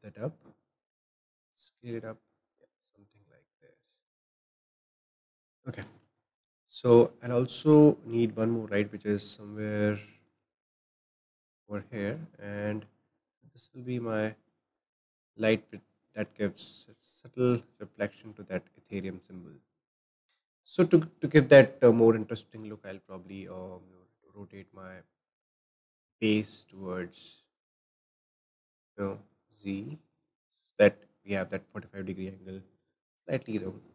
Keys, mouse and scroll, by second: 1.4 s, 6.2-8.7 middle drag, 8.7 shift+d, 10.1-11.0 middle drag, 11.0 click, 12.2-13.9 middle drag, 13.9 click, 15.1-17.1 middle drag, 17.1 click, 18.6-20.2 middle drag, 20.2 scroll up 5, 20.2 s, 20.5-22.5 middle drag, 22.5 click, 22.8-23.9 scroll up 1, 23.9 click, 28.6-29.1 scroll down 3, 29.1 middle click, 29.5-29.9 scroll down 1, 29.9-31.2 middle drag, 31.2-33.9 scroll up 5.